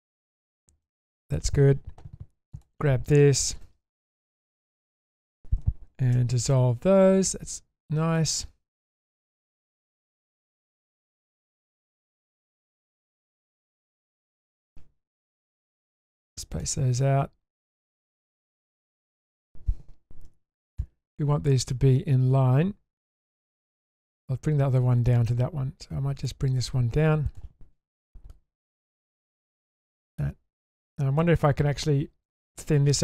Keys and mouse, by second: 0.8-1.2 middle drag, 2.6 click, 3.0 click, 3.6 2, 5.1 alt+shift+click, 6.1 ctrl+x, 6.5-8.2 middle drag, 9.0 ctrl+alt+click, 10.1 ctrl+shift+click, 11.8-12.3 middle drag, 12.8-13.4 shift+middle drag, 14.0 middle click, 15.6 click, 16.1 middle click, 16.5 click, 17.0-17.8 middle drag, 18.6 middle click, 20.3 1, 28.3 click, 29.4-30.2 middle drag, 30.8 click, 31.2 middle click.